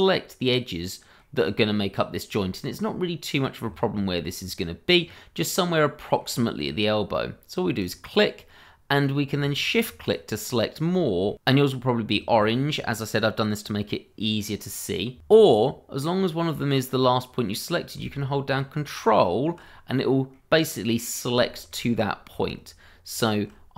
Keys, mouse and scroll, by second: 2.8 scroll up 1, 3.6 middle click, 4.1 scroll up 1, 5.0 scroll down 1, 5.3 middle click, 6.3-6.7 scroll up 1, 7.8 click, 9.5 shift+click, 11.3 shift+middle click, 18.9 click, 19.6 scroll down 1, 20.1 middle click, 21.5 shift+middle click, 21.5 middle click, 21.6 shift+middle click, 23.1 click.